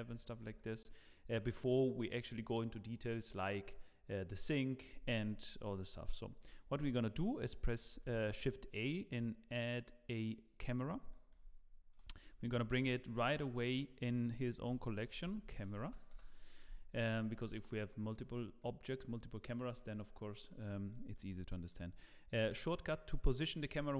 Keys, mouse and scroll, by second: 0.2 shift+middle click, 0.5 middle click, 5.7 middle click, 6.2 scroll down 1, 6.5 shift+middle click, 7.2 middle click, 7.9 shift+a, 10.6 shift+a, 10.8 scroll down 1, 11.1 shift+middle click, 12.5 m, 16.1 Return, 18.6 middle click, 19.9 middle click, 20.9 shift+middle click, 21.0 shift+middle click, 21.5 middle click, 21.9-22.4 scroll up 1, 22.5 shift+middle click.